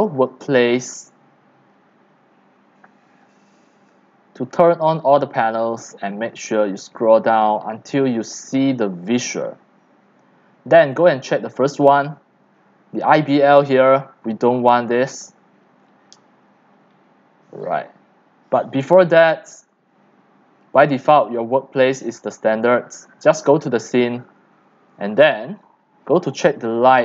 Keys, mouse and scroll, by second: 0.1 click, 3.2 click, 6.6 click, 7.0 click, 7.4 click, 8.0 drag, 9.2 click, 17.7 click, 19.5 click, 20.6 click, 21.1 click, 22.1 click, 23.3 click.